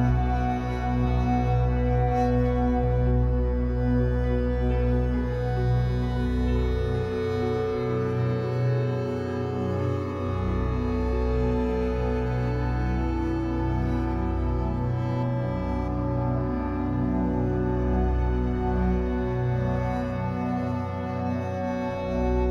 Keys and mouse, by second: 0.7 click, 4.0 e, 5.1 click, 5.4-6.1 typing, 5.9 click, 7.0 click, 8.1 click, 10.1 typing, 12.1-13.9 typing, 12.9 click, 14.7 click, 15.1-18.3 typing, 16.0 click, 17.2 click, 17.8-19.8 alt+drag, 20.3 3.